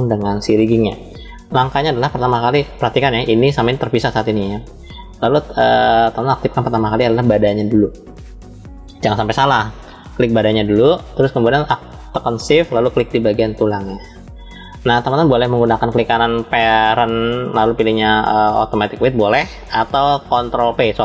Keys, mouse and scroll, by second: 0.9 click, 3.1 click, 4.1 click, 5.1 click, 7.3 click, 13.4 shift+click, 15.7-21.0 drag, 15.7 right click.